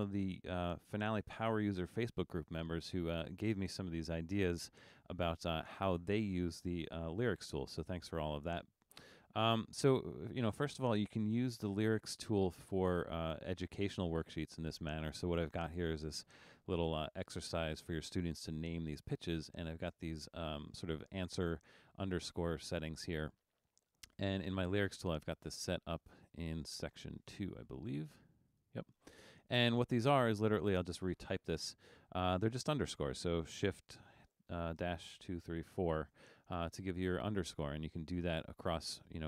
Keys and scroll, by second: 7.3 super+=, 31.8 BackSpace, 34.4 shift+-, 34.9 shift+-, 35.3 shift+-, 35.8 shift+-.